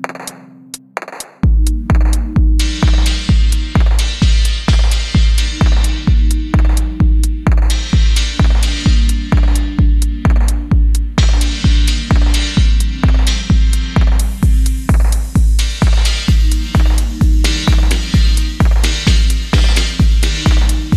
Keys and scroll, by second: 0.4-1.2 typing, 1.7 alt+h, 6.0 7, 6.3 Tab, 7.8 ctrl+space, 8.2 ctrl+space, 11.0-12.9 typing, 13.1 Return, 14.2 g, 16.3 g, 19.1 h.